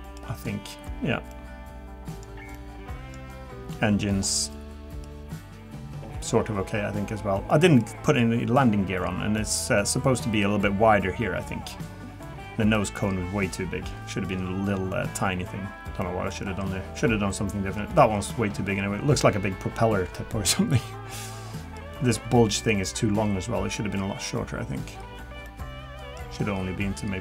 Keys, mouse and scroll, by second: 15.7 scroll down 1, 21.9 middle click.